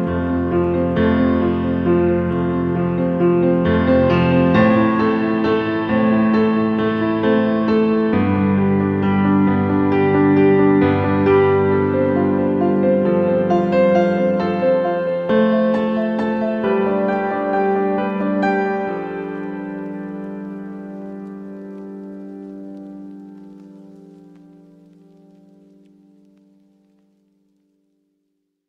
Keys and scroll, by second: 14.7 ctrl+a.